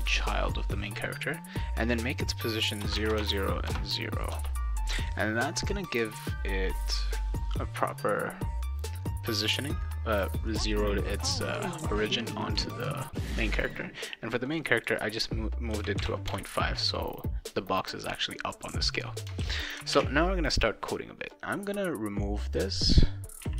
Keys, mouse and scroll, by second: 1.5 click, 2.9 Tab, 3.2 Tab, 13.4 click, 14.5 click, 18.5 click, 19.4 ctrl+s, 19.9 alt+Tab, 21.3 click, 22.5 click, 23.4 /.